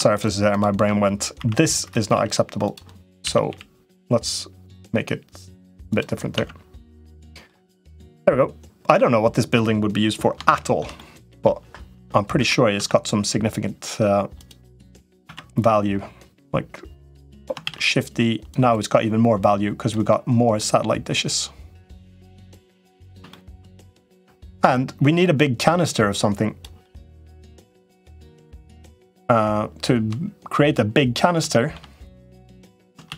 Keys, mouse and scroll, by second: 0.3 shift+click, 1.3 i, 2.0 e, 3.0 a, 3.2 g, 6.1 Tab, 6.7 middle click, 7.5 click, 7.9-9.3 middle drag, 10.3 shift+click, 10.4 shift+middle click, 10.7 middle click, 12.2 Tab, 12.6 Tab, 14.1 click, 14.7 Tab, 15.2 Tab, 16.9 middle click, 17.6 shift+d, 18.2-19.7 drag, 20.1 middle click, 21.1 click, 22.0 middle click, 23.1 shift+middle click, 24.2 click, 25.6 click, 26.8 middle click, 28.2 click, 28.6 Tab, 28.8 click, 30.8 middle click, 31.3 middle click, 32.2 click, 32.9 shift+d.